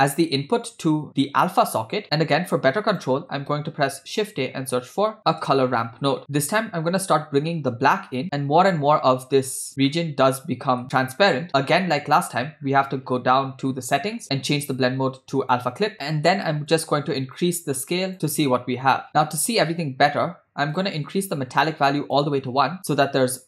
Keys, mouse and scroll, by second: 2.1 middle click, 2.5 click, 2.7-3.1 drag, 3.7 shift+a, 8.2-9.7 drag, 9.9 middle click, 10.8 scroll up 1, 12.8-14.5 scroll down 12, 14.5-15.9 drag, 16.7-18.1 drag, 18.1 middle click, 19.3 middle click, 20.7-22.5 drag.